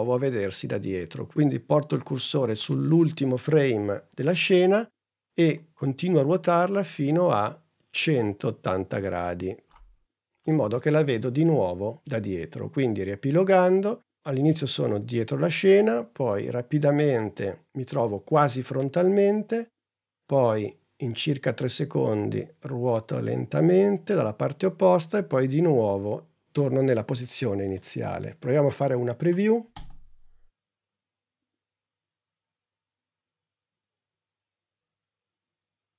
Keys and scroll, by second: 28.8 n, 29.6 space.